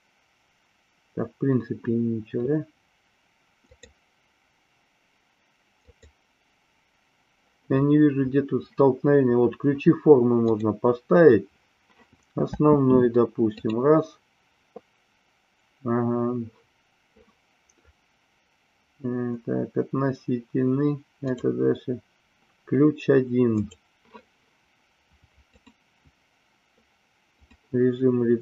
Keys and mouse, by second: 3.7 click, 5.9 click, 10.4 click, 12.5 space, 13.5-16.5 drag, 21.1 click, 23.5 click, 25.4-27.5 drag.